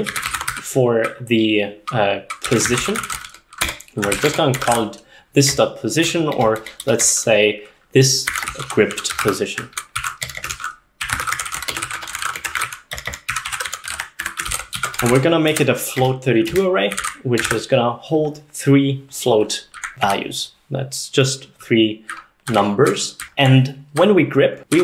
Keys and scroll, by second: 0.0-0.9 typing, 2.2-17.5 typing, 16.6 Escape, 17.6 ctrl+s, 19.6-20.3 typing, 22.1-24.8 typing.